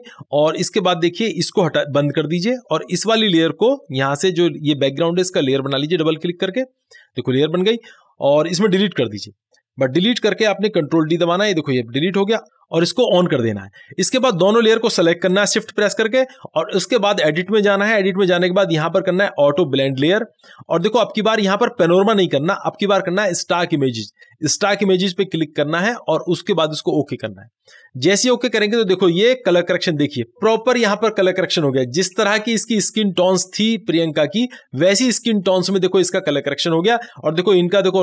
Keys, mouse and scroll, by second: 2.1 click, 5.8 click, 5.9 click, 9.2 Delete, 13.2 click, 15.6 shift+click, 17.4-24.0 drag, 27.0 click, 37.4 click.